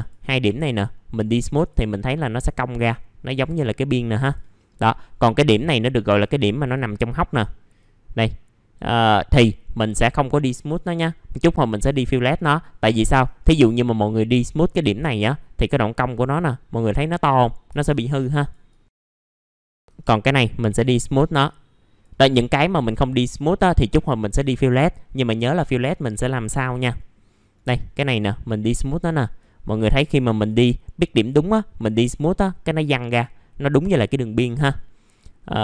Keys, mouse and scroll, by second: 0.4 right click, 3.9 click, 4.5 middle click, 5.5-10.9 drag, 12.2-13.2 scroll up 1, 13.2 right click, 14.7 click, 18.3 click, 19.8 right click, 20.6 click, 22.3 middle click, 22.4-23.1 scroll down 1, 23.1 middle click, 26.4 click, 26.9 middle click, 28.6-30.9 drag, 34.8 scroll up 1, 35.1 click.